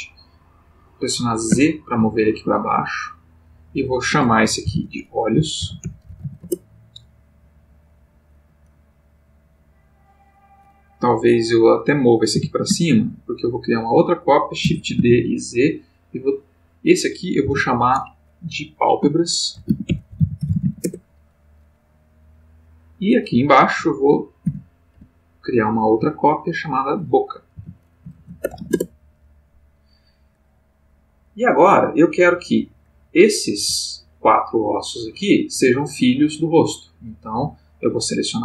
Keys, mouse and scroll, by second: 1.5 z, 3.4 click, 4.6 F2, 5.6-6.2 typing, 6.4 shift+Return, 9.4 click, 12.3 g, 12.7 z, 13.8 click, 14.6 shift+d, 15.0 shift+z, 16.3 click, 17.4 F2, 19.5-20.6 typing, 20.8 shift+Return, 22.6 click, 24.4 shift+d, 24.9 shift+z, 26.6 click, 27.5 F2, 28.1 shift+b, 28.4 shift+o, 28.5 shift+c, 28.6 shift+a, 28.7 shift+Return, 32.0-33.3 drag, 33.5 g, 35.5 Escape, 37.0 click.